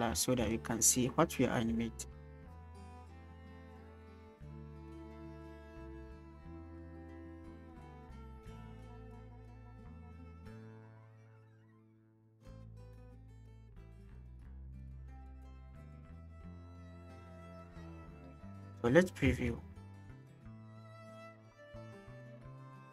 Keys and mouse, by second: 0.8 click, 2.0 click, 7.0 drag, 11.5-13.5 drag, 18.7 click, 19.3 space.